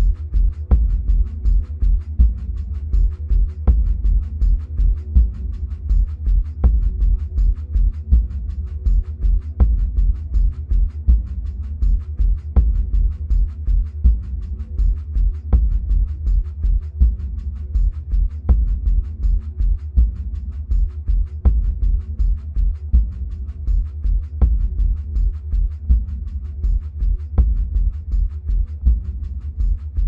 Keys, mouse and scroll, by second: 0.0-4.0 drag, 4.0-6.8 middle drag, 6.8 click, 11.8 click, 18.2-23.9 drag, 23.9-26.9 middle drag, 26.9-30.0 drag.